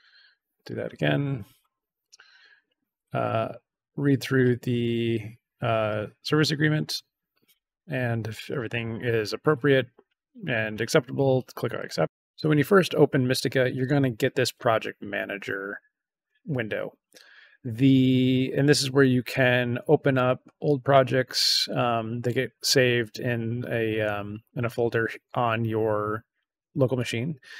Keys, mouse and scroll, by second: 0.5 click, 2.0 click, 3.9-5.1 scroll down 2, 5.6 scroll down 2, 11.7 click, 20.1 click.